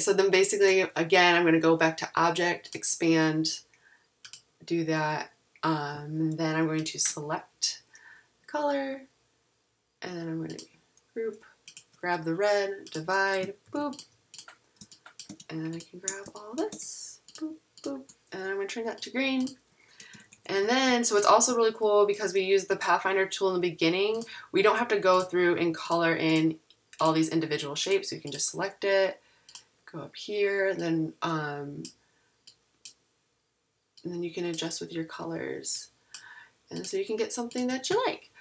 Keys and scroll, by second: 13.6 shift+super+g, 20.1 super+-, 22.1 super+=.